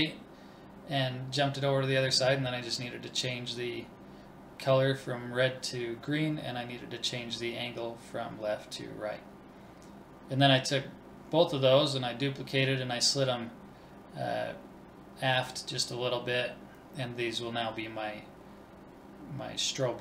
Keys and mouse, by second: 0.0 click, 2.6 ctrl+s, 3.1 click, 4.4 middle click, 4.7-6.1 typing, 6.7 click, 7.0 middle click, 7.4 shift+d, 8.7 click, 8.8-10.1 middle drag, 10.1 click, 11.1 BackSpace, 11.3 Left, 11.7 BackSpace.